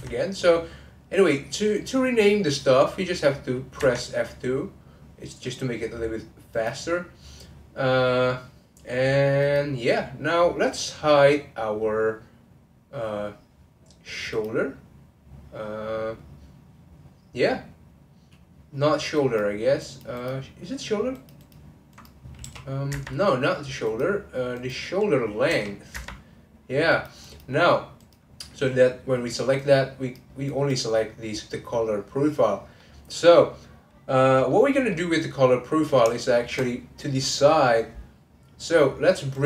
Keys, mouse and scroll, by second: 0.3-3.1 scroll down 1, 8.4-9.4 scroll up 1, 9.4 click, 10.4-11.1 scroll down 1, 11.1-11.8 scroll down 1, 14.3 click, 19.2 click, 19.8 click, 20.2 click, 21.1 click, 21.4 click, 21.9 click, 22.4 g, 23.8 click, 25.5 g, 26.9 click, 27.2 click, 28.0 click, 29.5 click, 30.4 click, 32.8-39.2 middle drag.